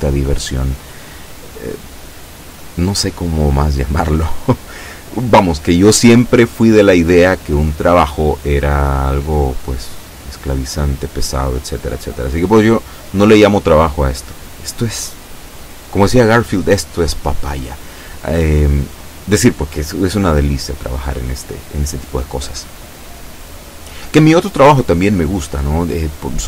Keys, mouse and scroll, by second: 1.2-2.4 drag, 10.1-12.7 shift+middle drag.